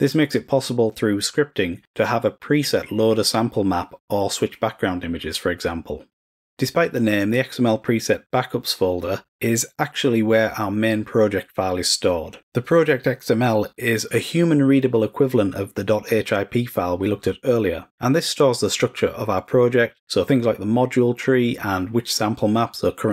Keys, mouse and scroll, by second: 7.6 click.